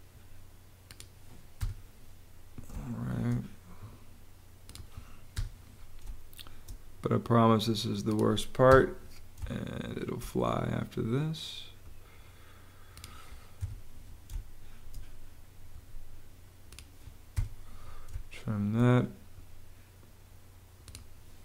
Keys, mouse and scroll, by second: 1.0 click, 1.5 BackSpace, 2.7 space, 5.3 BackSpace, 5.9 space, 6.5 space, 8.6 BackSpace, 9.3 space, 13.5 BackSpace, 14.2 space, 14.7 space, 17.3 BackSpace, 18.0 space.